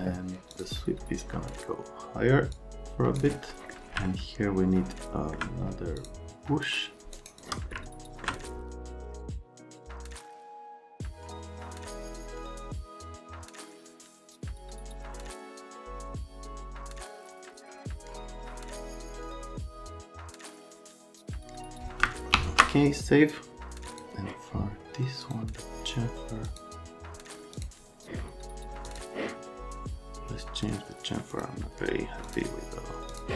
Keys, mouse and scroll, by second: 0.5 click, 2.5 click, 3.5 right click, 4.0 alt+right click, 5.9 click, 6.9 shift+click, 7.1 shift+right click, 7.7 alt+middle click, 8.7 alt+q, 8.8 Escape, 9.1 click, 9.6 middle click, 9.8 alt+middle click, 11.5 middle click, 12.0 click, 12.1 middle click, 12.3 click, 12.4 alt+q, 12.6 middle click, 12.7 click, 13.1 z, 13.2 click, 13.4 e, 13.7 click, 13.8 F3, 14.1 click, 14.6 click, 15.0 Escape, 15.2 click, 15.6 Escape, 15.8 middle click, 16.0 click, 16.3 z, 16.5 F3, 17.6 click, 17.9 click, 18.1 scroll down 1, 18.2 click, 18.4 middle click, 18.5 click, 19.0 click, 19.5 click, 20.2 right click, 20.9 right click, 21.1 x, 21.3 right click, 21.5 right click, 22.3 s, 23.9 click, 25.2 click, 26.4 click, 27.5 click, 28.8 click, 31.3 click, 32.2 click, 33.1 click.